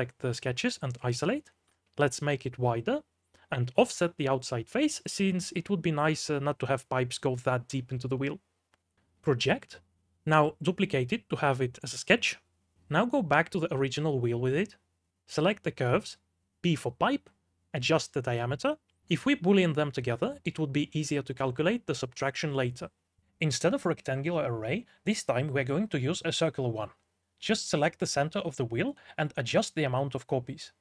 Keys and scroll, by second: 2.4 5, 6.0 shift+w, 7.1-16.4 typing, 19.8 d, 22.0 4, 22.6 q, 23.4 f, 26.6-27.9 typing.